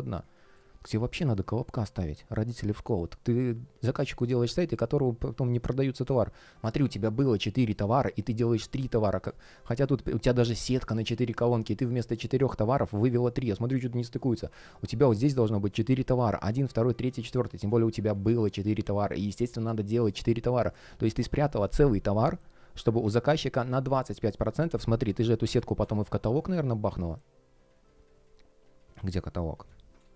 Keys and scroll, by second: 0.4 space, 9.0-9.9 typing, 21.2 shift+o, 25.4 space, 26.1 space, 29.9 space.